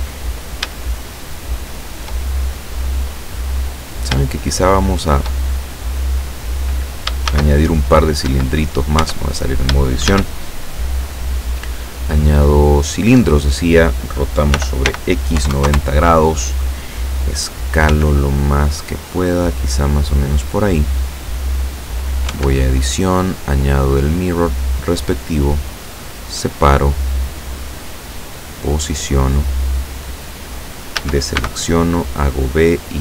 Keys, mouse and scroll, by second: 0.3-0.7 shift+scroll up 1, 0.9-2.1 shift+middle drag, 3.4-3.7 scroll down 1, 4.3-5.5 shift+middle drag, 7.3 shift+a, 8.3 Escape, 9.1 Tab, 10.1 shift+a, 12.8 click, 14.6 r, 14.9 x, 15.4 KP_9, 15.6 KP_0, 15.7 KP_Enter, 17.9 s, 20.4 click, 21.1-22.3 drag, 22.3 Tab, 23.1 click, 24.7 click, 25.7-28.0 drag, 28.5-30.4 drag, 31.0 a, 31.4 b, 31.7 click, 32.9-33.0 drag.